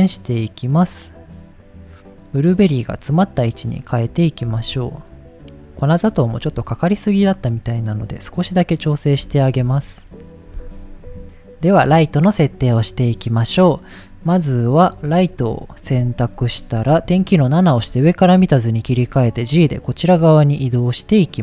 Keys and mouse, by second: 0.6 click, 4.5 r, 4.6 z, 5.8 click, 7.8 click, 9.3 shift+middle click, 11.1 KP_0, 11.2 ctrl+s, 14.7 middle click, 16.9 KP_7, 18.9 g, 21.2 click.